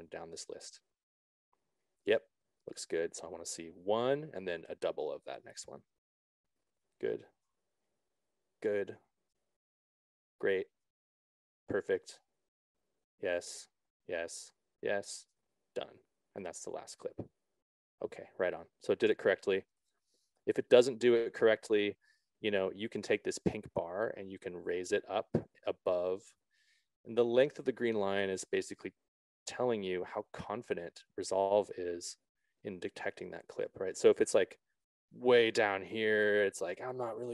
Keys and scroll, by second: 1.8 Down, 7.8 Down.